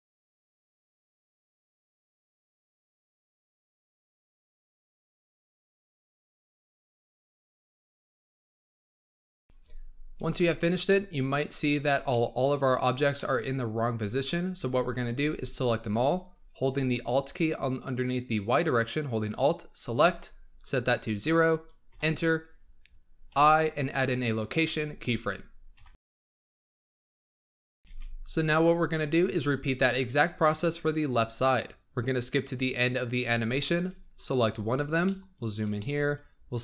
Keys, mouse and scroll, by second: 0.0-9.0 typing, 0.3 shift+middle click, 0.8 shift+middle click, 1.2 shift+middle drag, 1.6 shift+middle drag, 2.1 middle drag, 2.6 shift+middle click, 3.2 shift+middle click, 3.7 shift+middle click, 4.1 shift+middle drag, 4.7 shift+middle click, 5.1 shift+middle drag, 5.6 shift+middle drag, 6.1 shift+middle drag, 6.6 shift+middle click, 7.1 shift+middle click, 7.6 shift+middle drag, 8.0 shift+middle click, 8.5 shift+middle click, 8.9 shift+middle click, 10.7-12.0 scroll down 20, 12.0-12.7 middle drag, 12.7-13.1 scroll down 6, 13.1-14.5 middle drag, 14.5 z, 15.1 b, 19.6-22.6 alt+drag, 23.2 i, 25.7 KP_1, 26.5-27.6 scroll up 12, 27.6 shift+middle drag, 27.8 alt+a, 32.3-33.5 drag, 33.5-34.1 shift+middle drag, 34.1 click, 34.4-34.9 scroll up 7, 34.9 shift+middle click, 35.4-35.7 scroll up 3, 35.7 shift+middle click, 36.0 scroll up 2.